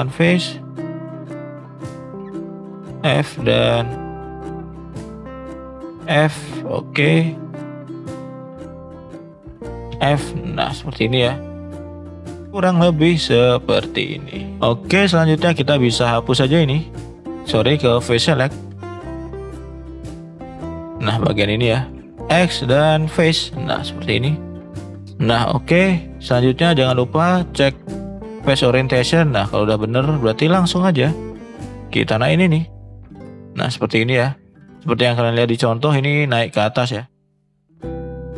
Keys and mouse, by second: 0.3 click, 2.8 f, 3.8 click, 4.2 shift+click, 6.5 click, 6.9 click, 8.8 shift+click, 9.9 f, 10.6 click, 14.6 shift+middle click, 17.4 click, 18.2 click, 18.5 shift+click, 18.8 shift+click, 19.0 shift+click, 19.4-22.1 shift+drag, 22.1 ctrl+z, 22.1 x, 22.3 x, 23.8 middle click, 25.2 shift+middle click, 27.2-29.5 drag, 30.4 shift+middle drag, 31.5-32.7 shift+drag, 32.9 shift+click, 33.3 middle click, 34.7 shift+middle click, 35.4 shift+middle click, 37.0 shift+middle click, 37.7 shift+middle click.